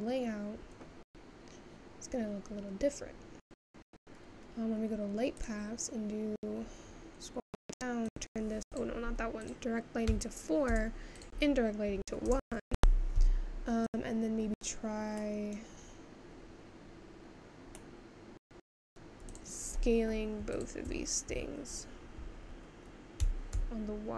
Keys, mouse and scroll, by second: 0.0-1.0 drag, 3.4 click, 5.2-6.0 scroll down 1, 6.3-7.5 drag, 7.5-9.1 scroll down 7, 9.1 click, 11.6-15.2 drag, 15.2-16.1 scroll up 7, 18.1 middle click.